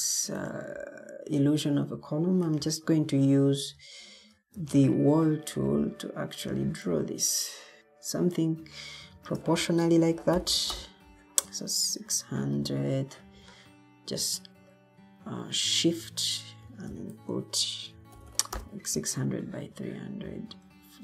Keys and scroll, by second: 4.5 Escape, 9.0 shift+Tab, 9.8-11.0 typing, 15.5-16.3 typing, 16.5 shift+Tab, 17.6-18.7 typing, 20.3-21.0 typing.